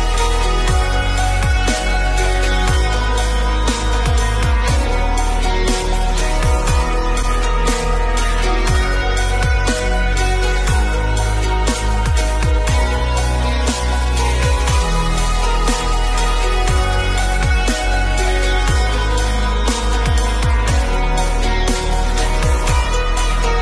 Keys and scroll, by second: 21.2 ctrl+alt+z.